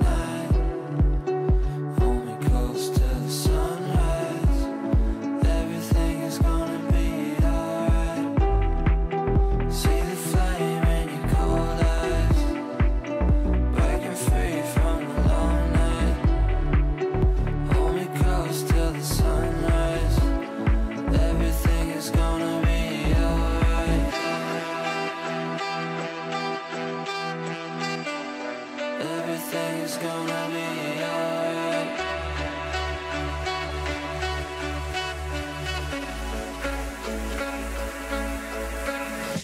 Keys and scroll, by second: 12.5 KP_Add.